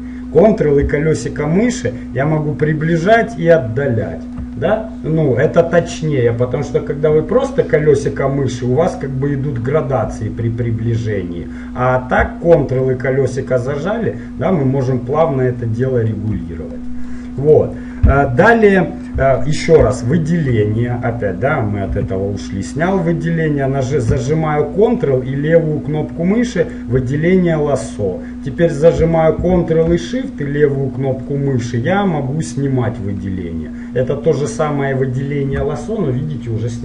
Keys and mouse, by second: 1.4-3.2 middle drag, 7.8-11.6 middle drag, 12.8 middle click, 13.2 middle click, 13.3 middle click, 14.1 middle click, 14.4 middle click, 16.8-25.1 middle drag, 17.6 click, 19.2-21.4 drag, 22.1 a, 25.1-26.9 drag, 31.4-33.3 drag.